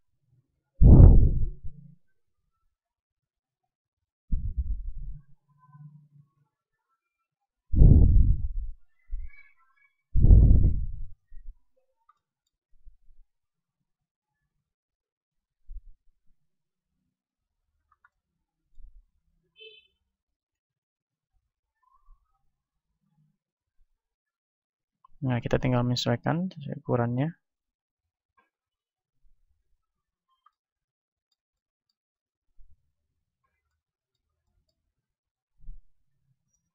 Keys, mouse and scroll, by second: 0.6 b, 1.3-5.8 drag, 2.6 b, 4.4 a, 4.9 b, 6.2-9.8 drag, 9.2 a, 9.4 b, 10.8-12.4 drag, 12.1-13.8 middle drag, 12.9 KP_1, 13.8 ctrl+Tab, 14.8-16.3 right drag, 16.2 s, 17.6-22.1 drag, 20.6 ctrl+Tab, 21.8 right click, 24.8 click, 24.8 KP_1, 26.1-27.9 drag, 30.4 middle click, 30.9 click, 31.7 middle click, 32.0 right click, 32.6 middle click, 33.7 middle click, 33.8-36.7 drag, 33.8-36.7 right drag.